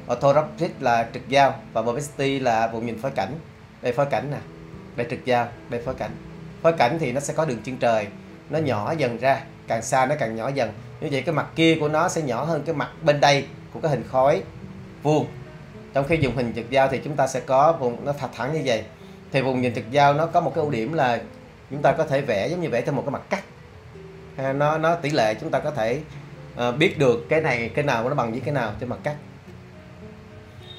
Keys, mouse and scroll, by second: 3.3 5, 4.8 5, 5.5 5, 16.9 5.